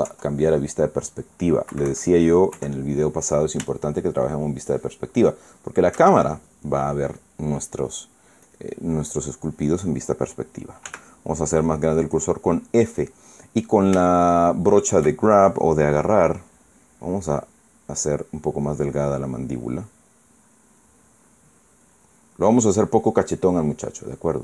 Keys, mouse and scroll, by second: 0.8 KP_5, 2.4 KP_Subtract, 3.3 KP_1, 4.4-5.5 shift+drag, 6.0 shift+click, 9.2 click, 10.0 click, 11.6 f, 12.9 click, 14.7 shift+middle click, 17.8-19.6 drag, 20.0 click, 20.8-21.5 drag, 21.5 click, 22.6 click, 23.3 click, 23.7 click, 24.2 click.